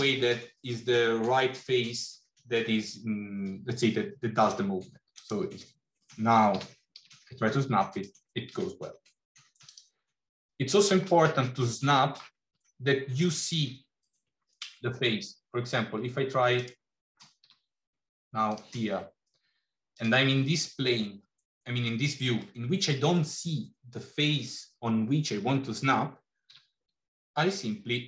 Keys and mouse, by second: 6.5 g, 9.5 click, 11.5 middle click, 17.3 g, 26.5 g.